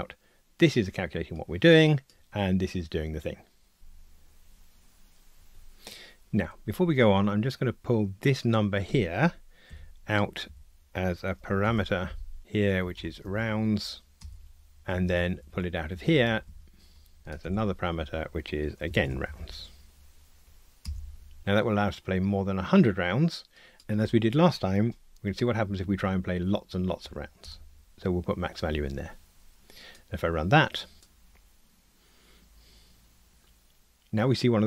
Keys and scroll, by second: 3.8 ctrl+r, 9.7 alt+Up, 11.7 alt+super+p, 17.2 alt+Up, 17.4 alt+super+p, 27.5 Return.